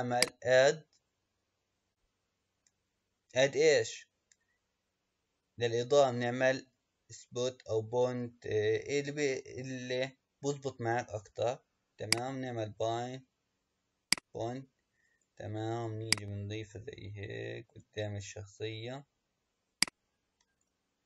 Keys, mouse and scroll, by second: 0.1-3.2 drag, 14.0 click, 16.1 click, 19.7 click.